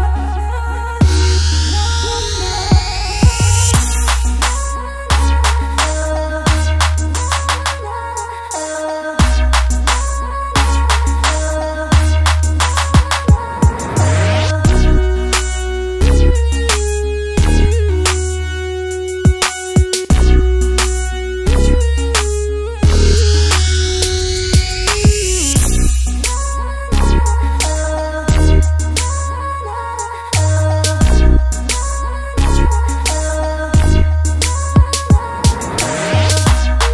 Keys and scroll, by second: 18.3 super+s, 19.0 Right, 19.1-20.8 typing, 28.7 super+z, 31.7 b, 33.2 space, 35.2 super+z, 35.4 space.